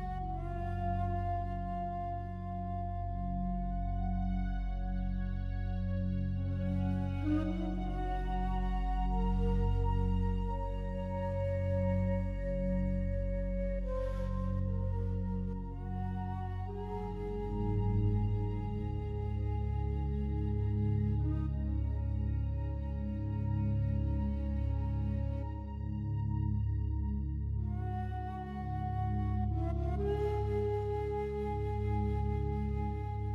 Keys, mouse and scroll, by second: 0.0-0.9 drag, 1.2 click, 2.5-6.0 drag, 6.7 click, 7.1 click, 8.0 click, 9.3 click, 12.2 click, 14.0-21.6 ctrl+alt+drag, 22.2 click, 23.2 click, 24.9-26.5 drag, 27.2 click, 28.1 click, 28.5 click, 29.3-31.4 typing.